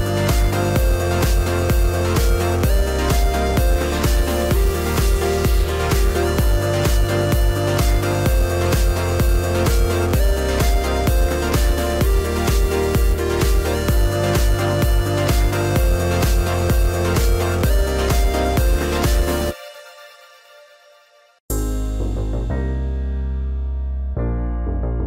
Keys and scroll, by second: 0.0 Up, 0.7 Delete, 3.2 Delete, 4.1 Down, 7.4 Up, 8.1 Delete, 9.1 Down, 11.2 Delete, 12.2 ctrl+z, 13.0 Down, 14.1 Delete, 14.9 Down, 16.7 Delete, 17.5 Down, 20.3 Delete, 21.1 Down, 23.6 Delete, 24.3 Down.